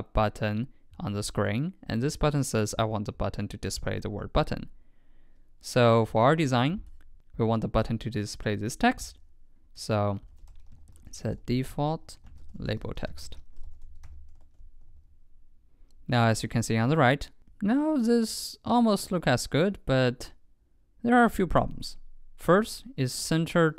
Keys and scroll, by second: 6.0 super+Tab, 14.4 super+Right, 14.9 super+s.